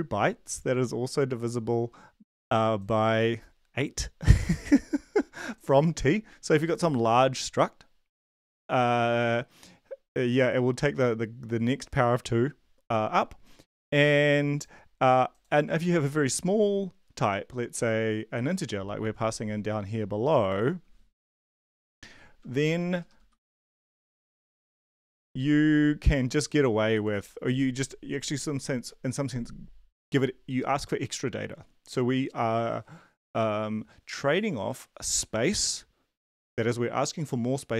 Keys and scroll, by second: 22.0 ctrl+shift+Left, 23.0 BackSpace, 23.2 End, 23.5 Left, 23.7 BackSpace, 23.9 Up, 24.1 Up, 24.6 shift+Up, 24.8 BackSpace.